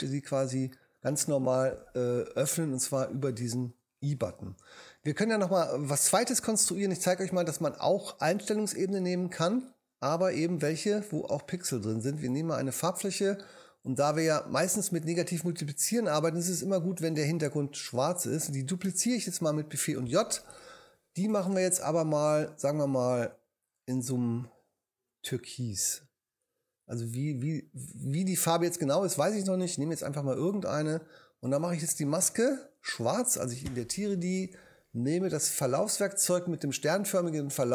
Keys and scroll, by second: 19.3 super+j, 32.9 super+i.